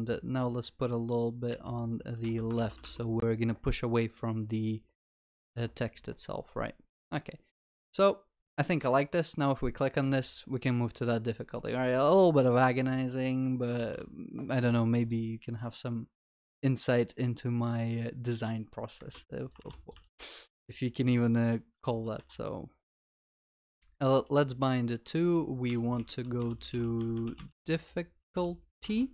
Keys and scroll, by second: 13.9 ctrl+s, 23.0 Escape.